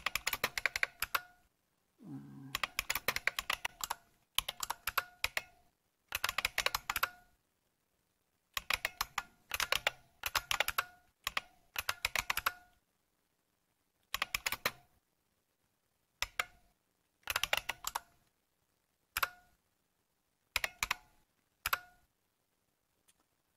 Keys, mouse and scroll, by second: 0.0-1.2 typing, 2.3-7.2 typing, 8.3-12.7 typing, 13.9-14.6 typing, 16.3-19.1 typing, 19.1 Return, 20.3-21.1 typing, 21.6 Return.